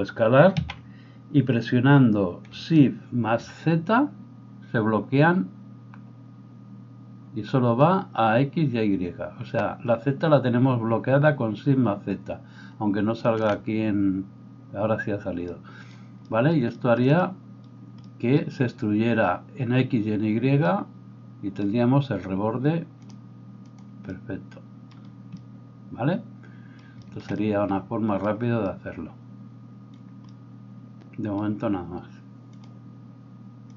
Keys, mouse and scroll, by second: 0.5 s, 13.2 shift+z, 13.5 shift+z, 23.1-33.7 drag.